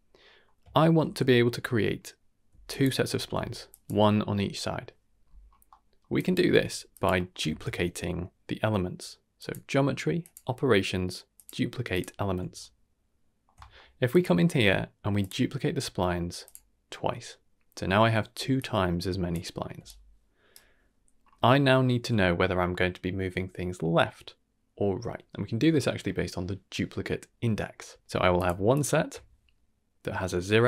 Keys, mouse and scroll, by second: 0.2 middle drag, 0.6 shift+middle drag, 1.0-1.6 middle drag, 2.4-3.9 typing, 2.6 click, 3.6 click, 5.4 scroll down 2, 5.6 middle click, 6.1 drag, 6.5 g, 7.1 middle click, 7.4 shift+a, 12.5-13.4 ctrl+middle drag, 13.6 middle click, 14.1-15.2 drag, 16.4 click, 18.5 click, 19.7 d, 19.8-21.1 right drag, 20.5 d, 21.1-21.9 scroll down 3, 21.5 middle click, 25.2 middle click, 28.3 ctrl+shift+click, 28.7 ctrl+shift+click.